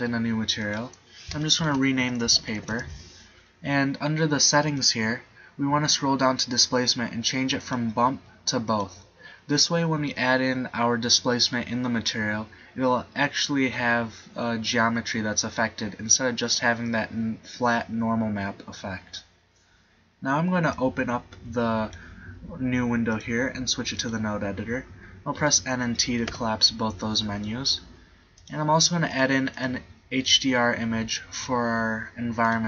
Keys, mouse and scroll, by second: 6.7 middle click, 6.8-9.8 drag, 21.0 click, 25.6 n, 26.4 t.